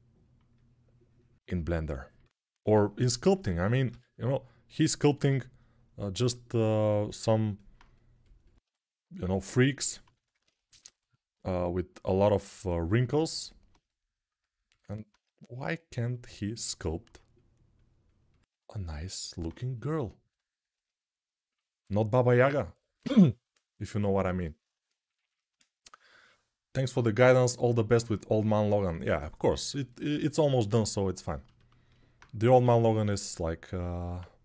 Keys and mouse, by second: 3.6 g, 32.3 q.